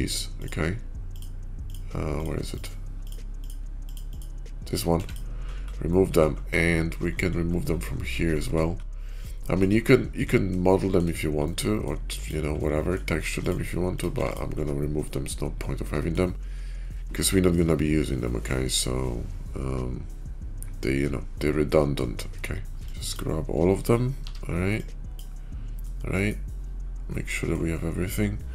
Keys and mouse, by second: 0.2 click, 3.7 click, 4.7 x, 5.8-6.2 middle drag, 9.2 shift+middle click, 10.5-10.9 shift+middle drag, 11.4-11.8 middle drag, 12.4-12.8 middle drag, 13.0 x, 14.1 x, 14.9-16.1 middle drag, 17.0-17.5 shift+middle drag, 18.1-21.8 middle drag, 22.8 KP_5, 22.8 b, 24.0 b, 25.7-26.2 middle drag, 27.2 middle click.